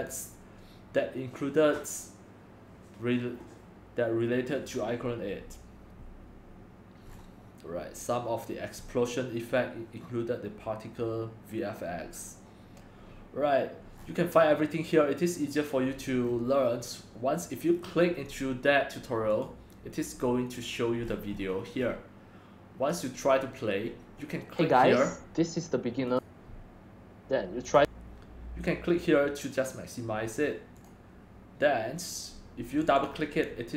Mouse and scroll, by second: 0.1-7.1 drag, 7.1-11.3 scroll down 4, 11.3-12.2 scroll down 1, 12.2 scroll down 1, 14.0-15.5 scroll down 5, 15.5-16.3 scroll down 1, 16.3-16.8 scroll up 5, 16.8-19.5 middle drag, 16.8-17.9 scroll, 19.5-21.1 drag, 21.1-23.1 scroll down 13, 21.2-23.1 middle drag, 23.1-29.5 drag, 31.5 click, 33.1 click.